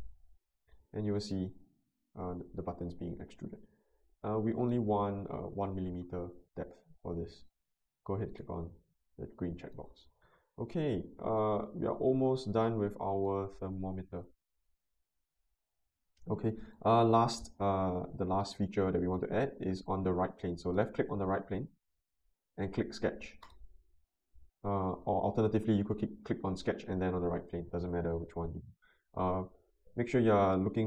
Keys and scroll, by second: 5.6 1, 6.0 Return, 28.4 n.